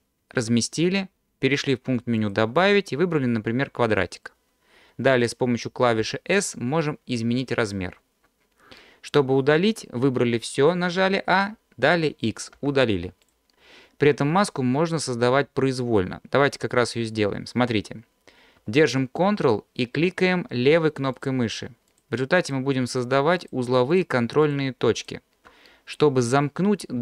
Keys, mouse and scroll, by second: 2.2-4.1 drag, 6.0 s, 7.6 click, 12.5 x, 16.2-16.6 scroll up 1, 21.2 ctrl+drag, 21.9 ctrl+click, 22.4 ctrl+click, 22.9 ctrl+click, 23.4 ctrl+click, 23.9 ctrl+click, 24.4 ctrl+click, 25.0 ctrl+click.